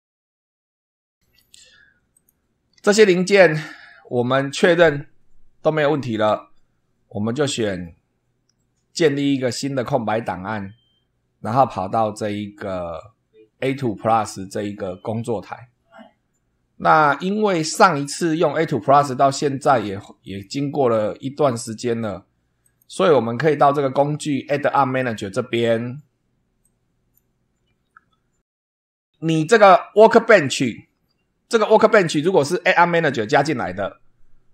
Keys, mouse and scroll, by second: 1.1 ctrl+w, 2.1 click, 2.7 ctrl+w, 9.6 click, 11.4 click, 20.2 click, 22.6 click, 25.0 click, 26.6 click.